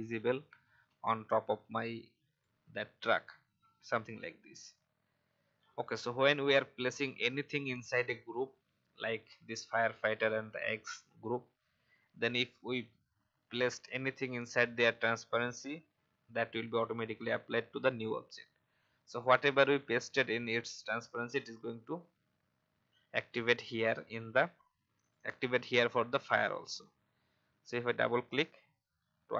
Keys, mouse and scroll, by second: 0.1-3.0 drag.